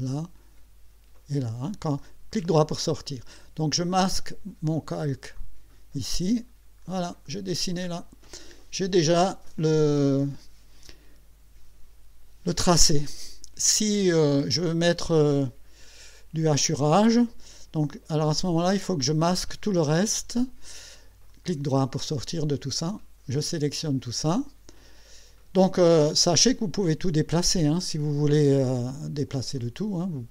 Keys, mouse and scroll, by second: 1.1 click, 2.0 right click, 2.8 scroll down 2, 4.8 click, 5.4 click, 6.4-7.1 scroll down 4, 7.3 middle click, 10.4-11.6 scroll up 2, 18.8 click, 19.4 click, 21.3 right click, 22.8-24.1 drag, 26.1-26.4 scroll down 1, 29.6-30.3 drag.